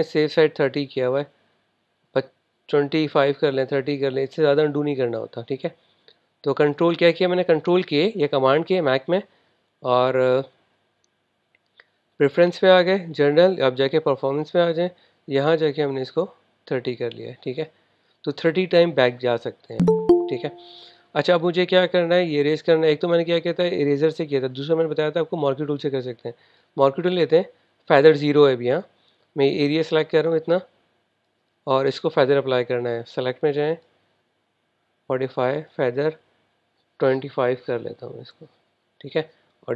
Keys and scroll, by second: 8.4 super+k, 37.7-38.2 typing, 38.4 Return.